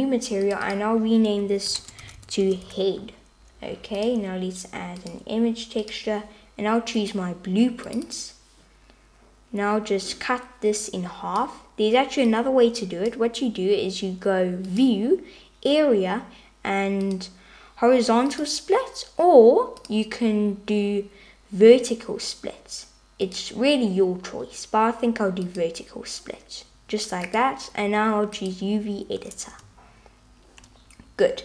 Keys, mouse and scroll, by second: 0.5 click, 1.4-3.1 shift+drag, 4.0-5.2 drag, 5.9-7.8 drag, 10.1-13.1 drag, 14.9-18.7 drag, 19.9-28.5 drag.